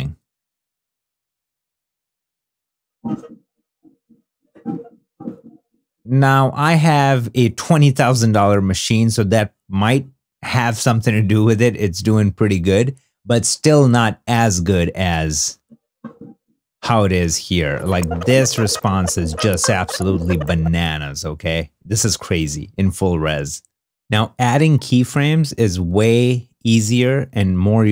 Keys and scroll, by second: 0.9 -, 1.6 =, 16.5 super+Tab.